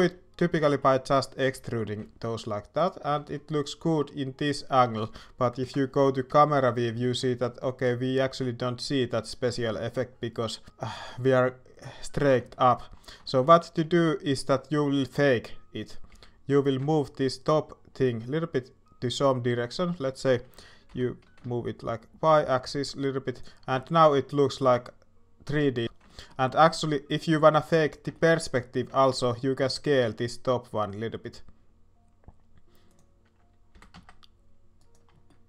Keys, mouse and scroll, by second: 0.6 shift+scroll up 1, 0.7 shift+middle click, 0.8 shift+scroll down 1, 3.3 middle click, 3.6-5.0 middle drag, 5.6 KP_0, 7.0 shift+middle click, 12.5 shift+middle click, 13.2 shift+middle click, 16.1 g, 23.8 shift+middle click, 23.8 shift+scroll up 1, 24.1 shift+scroll down 1, 26.0 shift+middle click, 26.7 shift+middle click, 28.1 shift+middle click, 28.9 shift+middle click, 29.6 s, 35.2 middle click.